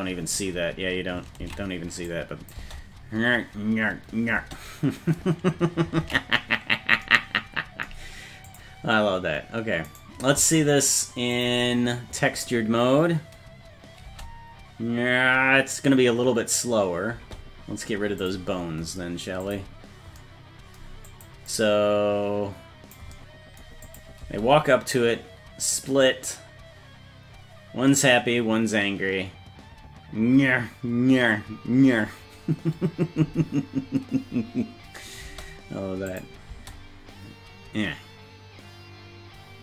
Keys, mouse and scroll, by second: 0.2-0.7 scroll down 4, 0.6-1.2 scroll up 2, 1.6 ctrl+s, 2.1 click, 2.6 space, 4.4 space, 6.2 ctrl+s, 8.5 click, 9.9-11.6 right drag, 11.6 click, 14.1 space, 17.2 space, 18.2 click, 19.4 click, 21.1 click, 21.5-23.0 drag, 23.9 click, 24.2 space, 35.3 space, 36.1 click, 36.5 space.